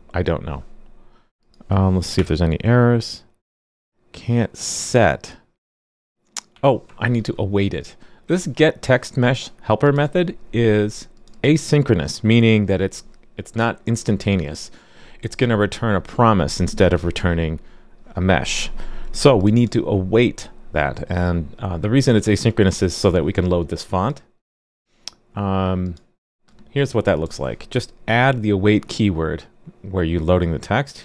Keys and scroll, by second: 2.1 alt+super+j, 6.5 alt+super+j.